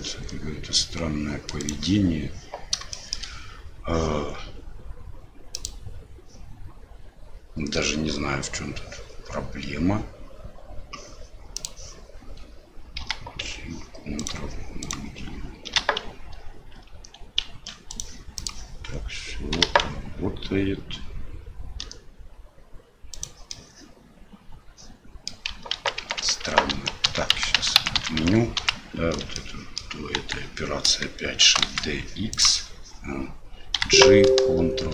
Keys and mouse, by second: 3.0 shift+middle click, 5.6-11.6 middle drag, 13.0 g, 14.8 click, 15.7 g, 19.5 g, 23.5-25.3 drag, 25.7 ctrl+z, 26.0 ctrl+z, 26.2 ctrl+z, 26.5 ctrl+z, 26.7 ctrl+z, 27.1 ctrl+z, 27.3-29.2 ctrl+z, 29.3 click, 30.2 KP_1, 31.5 shift+d, 33.7 g.